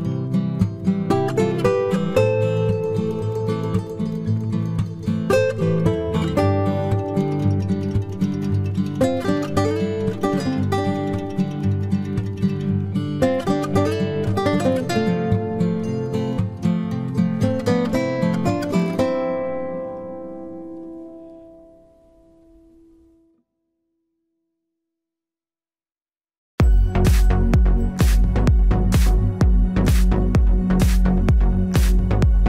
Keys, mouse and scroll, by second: 0.7 ctrl+z, 1.1 ctrl+z, 2.2 z, 2.7 c, 4.8 right click, 4.9 z, 5.3-6.5 middle drag, 6.2-7.9 drag, 6.2 right click, 8.0 KP_3, 8.3 Tab, 9.3 ctrl+s, 9.7 z, 11.9 z, 12.9 z, 17.0 Tab, 18.3-20.0 right drag, 18.5 c, 22.0-23.8 right drag, 22.3 ctrl+r, 23.5 ctrl+Tab, 24.4 c, 27.6 right click, 28.0 KP_Decimal, 29.0 i, 29.7 z, 30.0 middle click, 30.9-32.2 drag, 31.9 KP_3, 32.1 z.